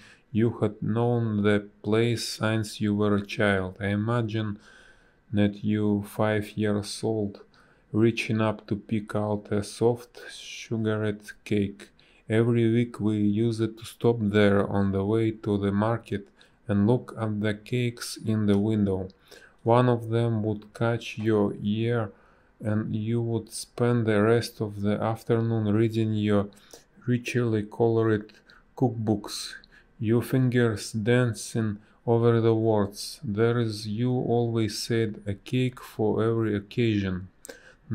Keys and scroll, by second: 0.5 space, 6.7 space, 8.2 space, 13.4 ctrl+z, 19.5 space, 20.8 ctrl+z, 21.1 space, 22.0 ctrl+z, 26.9 space, 31.5 space, 35.9 space.